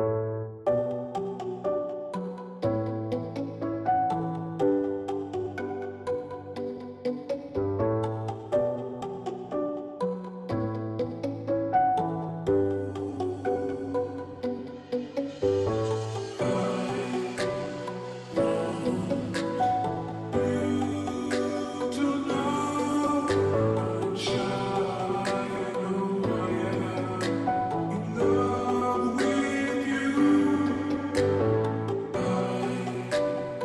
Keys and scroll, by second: 0.8 Right, 13.5-14.2 typing, 17.8-18.5 typing.